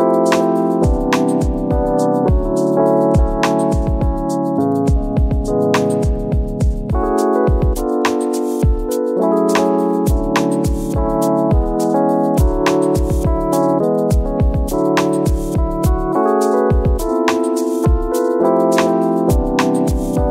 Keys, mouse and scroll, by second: 0.2-0.5 scroll up 1, 0.5 ctrl+b, 1.9 shift+click, 2.1 ctrl+KP_Subtract, 2.5 alt+s, 3.7 shift+click, 4.0 scroll down 1, 4.9 scroll down 1, 5.1 Tab, 6.1 scroll down 1, 6.3 Tab, 6.5 alt+click, 7.1 alt+shift+click, 7.3 ctrl+KP_Add, 9.3 Tab, 9.7 click, 10.3 scroll up 1, 10.5 ctrl+a, 10.7 scroll down 1, 10.9 scroll up 1, 11.0 Tab, 11.5 click, 13.4 click, 13.6 Tab, 13.9 a, 14.9 click, 17.4 scroll down 1, 18.1 scroll up 1, 19.1 scroll up 1, 19.5 click, 19.7 scroll down 1.